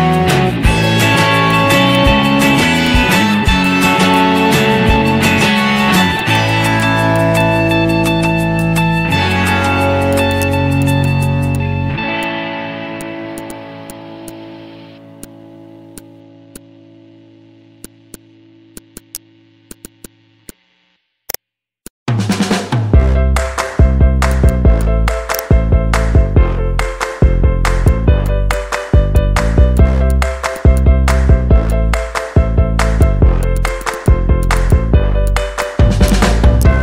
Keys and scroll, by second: 0.9 z, 16.8 z, 18.0 z.